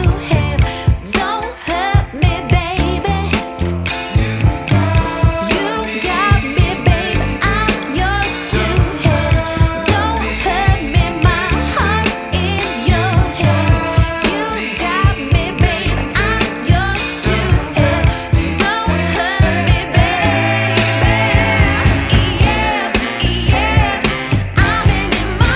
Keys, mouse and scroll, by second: 1.1-1.7 scroll up 2, 1.7-2.2 scroll down 1, 2.2-3.5 scroll down 1, 6.6-7.4 scroll down 3, 6.7-7.4 scroll up 1, 7.4 scroll up 1, 7.5-7.9 scroll down 2, 7.9-8.3 scroll up 1, 8.3 scroll down 2, 8.4 scroll up 1, 9.9 click, 11.5 click, 12.6 click, 12.7 F10, 14.5 click, 16.6 click, 18.1 scroll down 1, 18.1-18.6 scroll up 4, 19.4 click, 21.1 shift+a.